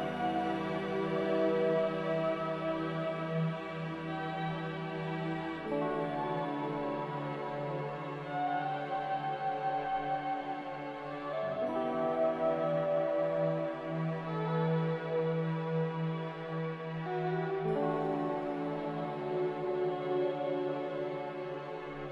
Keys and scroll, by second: 0.2-1.0 typing, 8.6 z, 10.2 Delete, 11.1 c, 16.0 z, 16.9 Delete, 19.2 c.